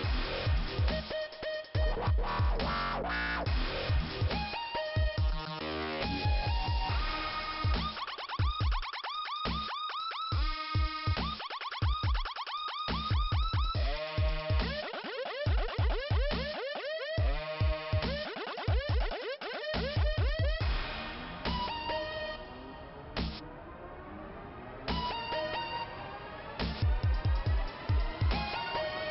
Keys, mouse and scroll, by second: 0.1 shift+Return, 6.1 click, 7.5 click, 8.0 click, 9.5 click, 15.3 click, 20.6 scroll down 2, 22.3 click, 23.7 click, 24.5 click, 26.2 click.